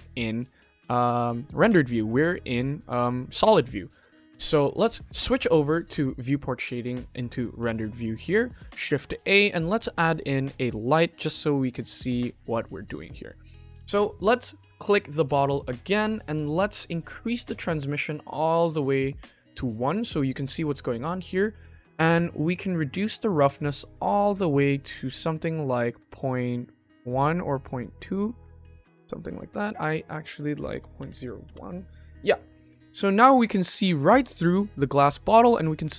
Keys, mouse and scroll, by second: 6.2 click, 7.6 click, 8.8 shift+a, 11.1 g, 12.8 click, 17.2-19.4 drag, 23.5-28.4 drag, 29.8-31.4 drag, 32.2 click, 33.2 click, 34.8 click.